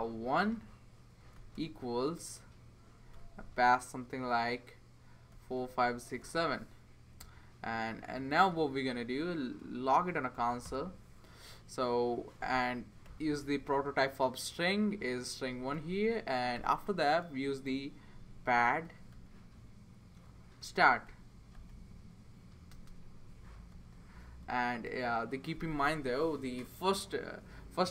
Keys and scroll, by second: 0.0-1.9 typing, 3.1 ', 5.1-6.7 typing, 7.2 Right, 8.9 Return, 9.6 Return, 10.3 typing, 12.8-14.0 typing, 15.7 Return, 16.5 typing, 17.9-19.3 typing, 20.4-25.4 typing.